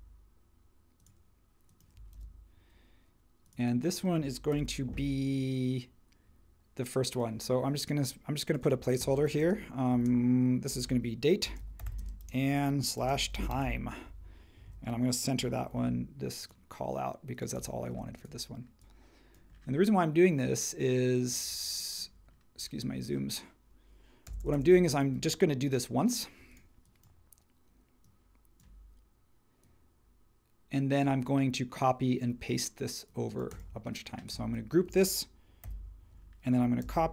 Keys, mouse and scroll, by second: 2.1 super+v, 4.5 super+t, 9.9-14.1 typing, 14.6 super+a, 17.9 space, 24.2 Left, 24.4 Left, 35.6 super+g, 36.8 super+c.